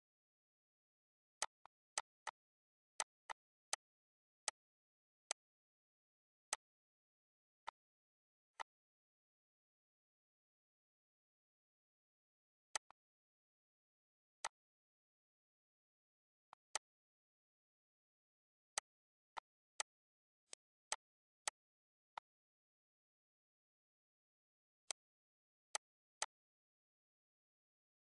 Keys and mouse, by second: 1.3 click, 2.9 click, 4.4 click, 5.2 click, 6.5 click, 7.6 click, 8.5 click, 12.7 click, 14.1 z, 14.4 click, 16.4 click, 17.5 ctrl+s, 17.7 click, 18.4 ctrl+s, 18.7 click, 19.3 click, 20.5 click, 22.1 click, 24.8 click, 25.7 click.